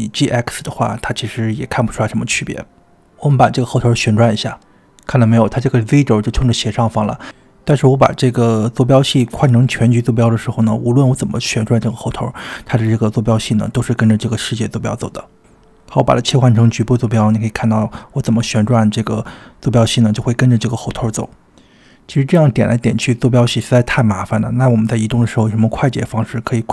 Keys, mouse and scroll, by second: 0.4 g, 8.6-10.5 drag, 12.9 click, 13.3 r, 14.5 r, 16.2-17.6 drag, 18.2 r, 21.4 click, 26.1 click.